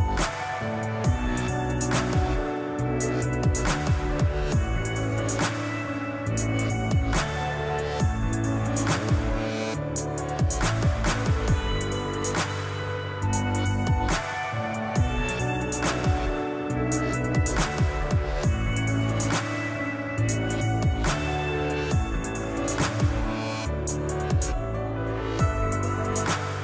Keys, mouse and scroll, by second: 2.2 scroll down 2, 2.4-7.3 middle drag, 4.0-6.0 scroll up 2, 6.0-7.3 scroll up 1, 7.3-10.7 drag, 9.3 g, 10.8-13.9 middle drag, 12.9 g, 13.9 click, 14.0-16.0 middle drag, 15.2 s, 16.0 click, 16.2 scroll up 2, 16.4-19.7 middle drag, 19.7-22.4 drag, 22.4-26.6 middle drag, 22.9 scroll down 2, 25.2-25.5 scroll up 2, 26.3 s.